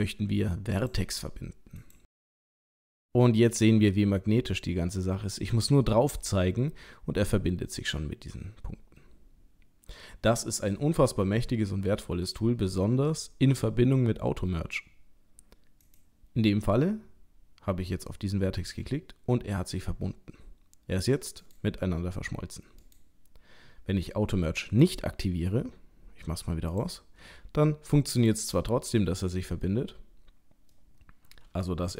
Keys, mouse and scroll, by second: 1.8 click, 18.6 g, 22.0 g, 24.8 click, 26.7 click, 27.2 g, 28.6 middle click, 30.1-30.4 scroll up 2, 30.8 middle click.